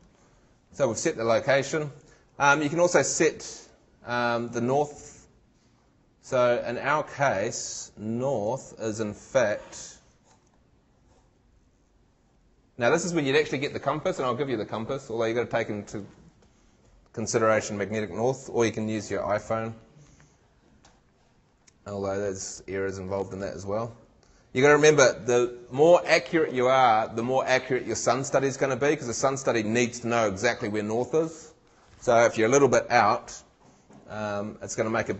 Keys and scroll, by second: 10.3 shift+super+Tab.